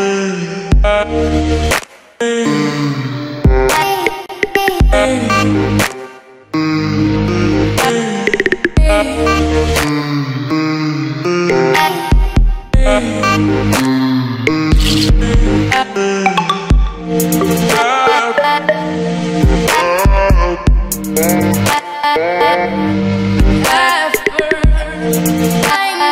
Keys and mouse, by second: 0.3 click, 1.1 middle click, 1.8 middle click, 2.2 ctrl+z, 2.8 q, 4.5 g, 5.2 Tab, 5.6 middle click, 6.5 middle click, 6.8 g, 7.2 alt+r, 8.3 r, 9.7 g, 11.0 Tab, 11.4 middle click, 11.5 space, 11.9-13.0 middle drag, 13.0 click, 13.3 q, 14.0 i, 15.0 Tab, 15.4 right click, 15.8 middle click, 16.2 h, 16.8 middle click, 17.2 q, 17.6 middle click, 18.2 q, 18.7-20.4 middle drag, 20.4 ctrl+a, 20.9-23.0 middle drag, 23.0 s, 23.5 g, 24.8 g, 25.1 s.